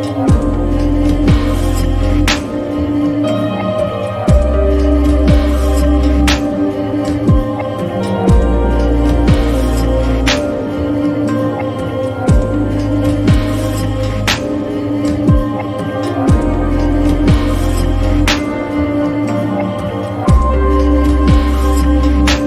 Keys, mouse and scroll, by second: 1.3 click, 6.2 click, 9.7 typing, 11.7-14.7 drag, 11.7 typing, 17.9 typing, 18.8 click, 20.6-22.4 drag.